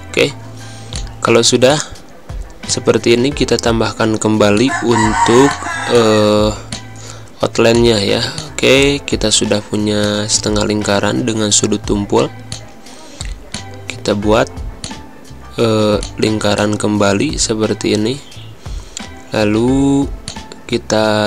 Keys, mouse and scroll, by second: 7.4 z, 7.7 click, 8.1 space, 8.3 click, 8.6 space, 10.0 click, 20.2 click.